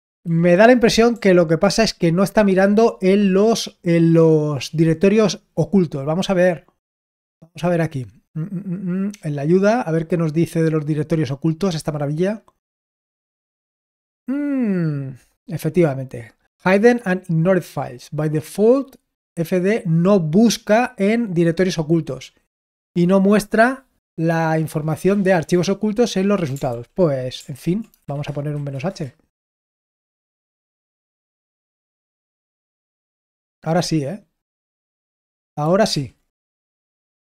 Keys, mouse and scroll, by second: 1.1 ctrl+p, 7.3 scroll down 1, 26.6 ctrl+p, 27.5 ctrl+n, 27.8-28.8 typing, 35.8 ctrl+p, 36.2 Return.